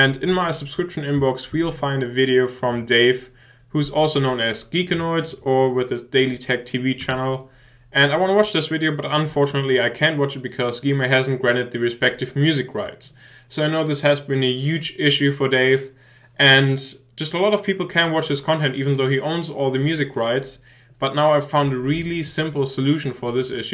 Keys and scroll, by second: 0.0-0.2 typing.